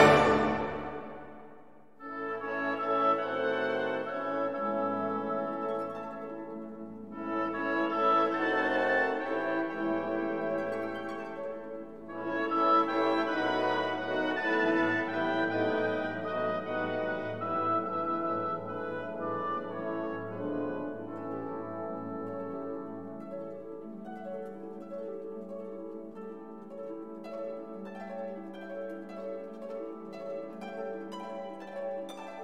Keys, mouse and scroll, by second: 1.8-6.6 drag, 7.0 scroll up 1, 7.4 scroll down 1, 7.8 click, 9.1-9.5 scroll up 2, 10.3 click, 12.0 click, 13.5 click, 14.4 3, 14.9 9, 15.9 click, 17.1-17.4 scroll down 2, 17.6-18.3 drag, 18.4 0, 19.2 scroll down 2, 19.8-21.0 drag, 22.3 click, 23.7 click, 24.7 click, 25.2 space, 26.3 click, 26.9 space, 27.5 click, 28.1-29.0 drag, 29.2 scroll down 1, 30.6 click, 31.4 right click.